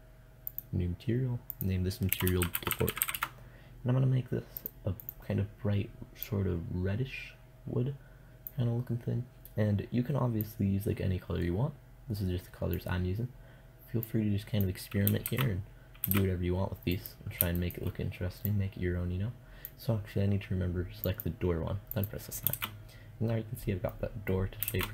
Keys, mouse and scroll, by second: 2.3 o, 4.5-6.3 drag, 14.7 shift+z, 15.5 shift+z, 16.4-17.9 drag, 19.9 middle click, 21.9 shift+z, 24.1 shift+z.